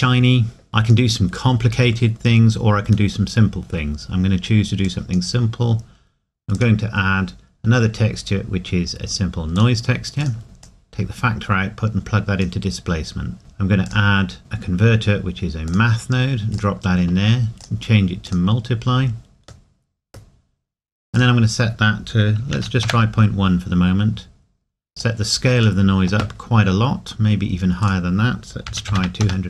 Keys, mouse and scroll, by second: 0.2 middle click, 0.7 click, 2.1-3.1 scroll up 1, 3.1 middle click, 4.1-4.9 scroll up 1, 4.9 click, 9.5 click, 15.7 click, 19.7 middle click, 21.1 click, 22.5 KP_Decimal, 28.7 KP_2, 29.0 KP_0, 29.2 KP_Enter.